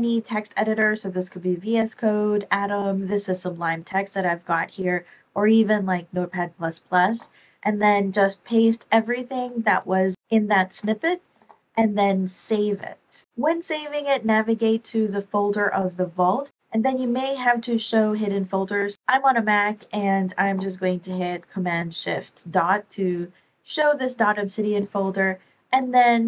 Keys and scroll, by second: 7.0 super+v, 11.3 super+s, 20.4 shift+super+..